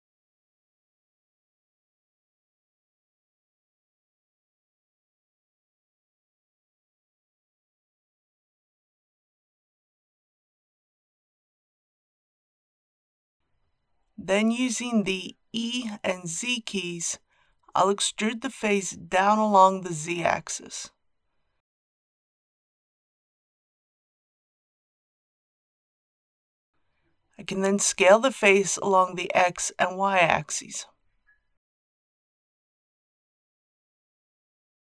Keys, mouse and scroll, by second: 4.0 click, 6.1 KP_1, 13.2-15.1 middle drag, 15.1-16.8 typing, 21.9 click, 27.0 s, 29.1 shift+z, 32.2 click.